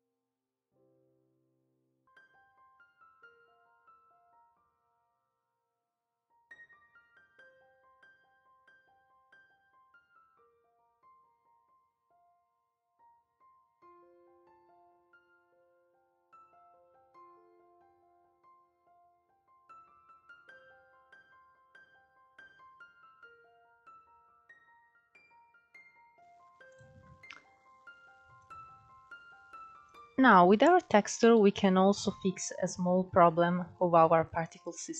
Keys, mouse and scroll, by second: 0.1-1.6 shift+middle drag, 1.6 click, 1.7 shift+middle click, 1.8-2.3 scroll up 3, 2.3 click, 3.1 scroll down 4, 3.3-4.3 middle drag, 4.3-4.7 scroll up 2, 4.7 click, 4.9 middle click, 5.1 scroll up 1, 5.2 scroll down 1, 5.3 middle click, 5.6 click, 6.1 middle click, 6.4 ctrl+z, 6.5 middle click, 6.9 click, 7.5 scroll up 1, 7.6 shift+middle click, 8.5 scroll up 2, 9.0 click, 9.6-10.2 scroll up 10, 10.2 click, 11.0 f, 11.4 click, 12.2-12.9 scroll down 5, 12.4 middle click, 12.9-13.2 scroll up 4, 13.2 click, 13.4 scroll down 3, 13.6 middle click, 14.2 click, 14.8 scroll up 2, 14.9 middle click, 15.3 click, 15.4 scroll up 2, 15.8 f, 16.4 click, 16.8 scroll down 4, 17.0 middle click, 17.4 scroll up 3, 17.5 middle click, 17.7 ctrl+z, 17.8 ctrl+z, 18.0 shift+middle click, 18.2 scroll up 1, 18.5 click, 19.1 middle click, 19.4 click, 20.0 scroll down 4, 20.1 middle click, 20.4 scroll up 4, 20.6 click, 20.9 scroll down 1, 21.0 middle click, 21.8 click, 22.0 middle click, 22.8-23.3 scroll down 1, 23.3-24.5 drag, 24.5 middle click, 24.7-25.6 scroll up 2, 25.0 click, 25.6-26.1 drag, 26.9-30.0 middle drag, 30.8 click, 31.6-33.1 middle drag, 33.1-33.6 scroll up 3, 33.6-34.6 middle drag, 34.6 scroll up 1, 34.8-34.9 scroll down 4.